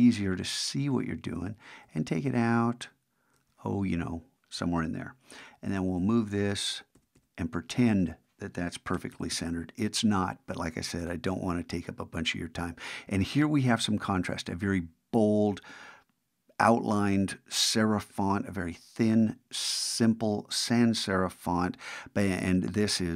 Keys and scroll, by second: 5.7 shift+Right.